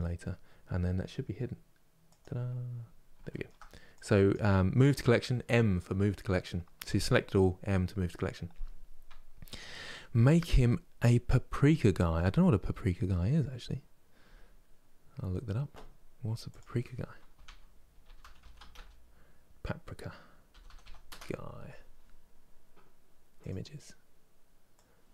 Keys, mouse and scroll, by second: 1.7 click, 2.5-3.0 scroll down 1, 3.0-4.0 shift+middle drag, 4.0 click.